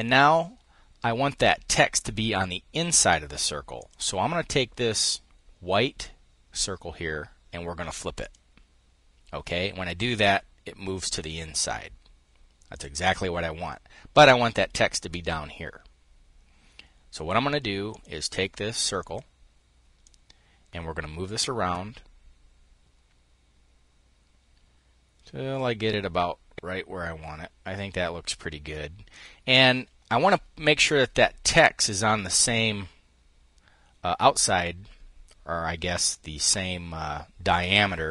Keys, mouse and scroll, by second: 3.4 click, 7.8 click, 12.4 click, 17.5 click, 18.6 click, 19.6-29.0 ctrl+drag.